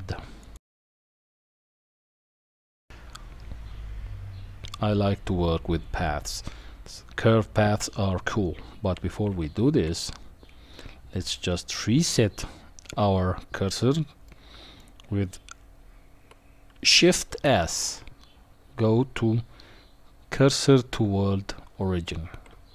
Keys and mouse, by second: 9.3 ctrl+z, 14.2-14.8 middle drag, 17.3 shift+s.